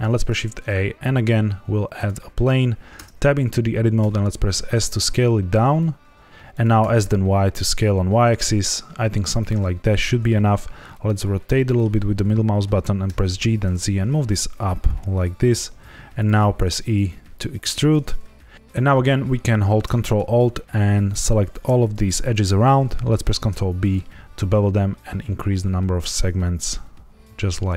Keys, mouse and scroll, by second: 0.0 shift+a, 2.9 Tab, 3.9 s, 6.5 click, 6.7 s, 7.0 y, 9.3 click, 10.2 middle click, 13.0 g, 13.2 z, 16.1 click, 16.3 e, 17.7 click, 18.0 middle click, 21.0 ctrl+alt+click, 23.2 ctrl+b, 24.5-26.2 scroll up 1.